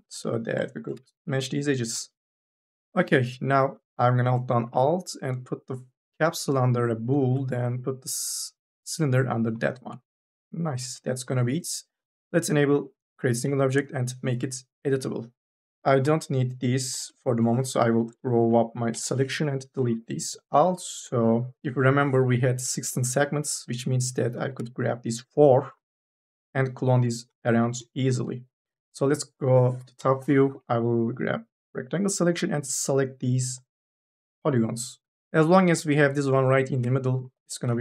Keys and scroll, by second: 0.1 e, 1.0 1, 2.6 4, 13.3 c, 15.3 3, 18.7 u, 19.0 y, 19.4 Delete, 20.8 3, 21.1 e, 22.4 u, 22.7 l, 24.2 3, 24.4 e, 29.8 KP_0, 35.1 2, 35.2 e.